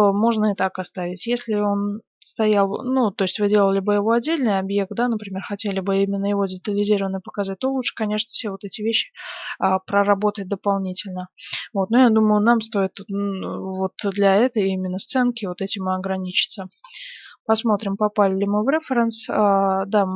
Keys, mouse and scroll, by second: 9.2-11.0 middle drag, 11.7-12.6 scroll up 1, 12.6-14.5 middle drag, 15.1 KP_1, 15.6-20.1 middle drag, 17.1 z, 18.7-20.1 scroll up 1.